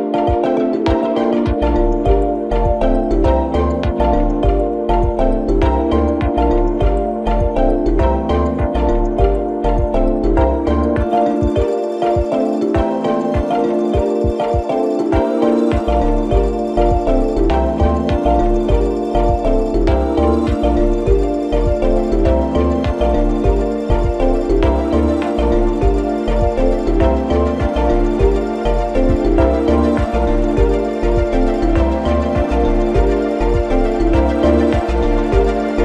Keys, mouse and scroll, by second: 4.1 ctrl+t, 6.2-9.4 drag, 18.4-26.2 drag, 27.7 click, 29.1 drag, 30.6-35.0 drag.